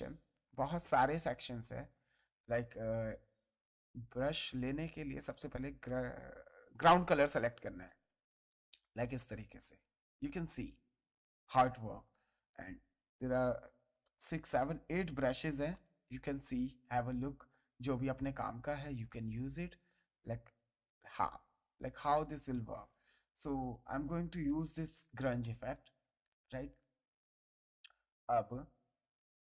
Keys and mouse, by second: 0.9 click, 2.3 ctrl+z, 5.7 alt+click, 11.7 ctrl+z, 12.5 click, 15.7 click, 17.8 ctrl+z, 19.0 click, 23.0 ctrl+z, 23.6 click, 25.4 space, 25.7 ctrl+click, 26.8 ctrl+click.